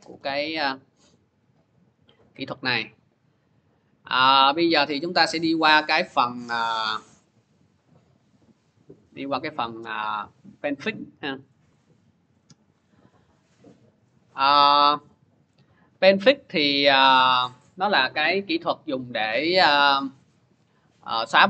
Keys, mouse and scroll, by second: 3.4 click, 5.0 click, 6.0 click, 9.5 click, 11.3 click, 15.2 click, 17.2 click, 17.3 click.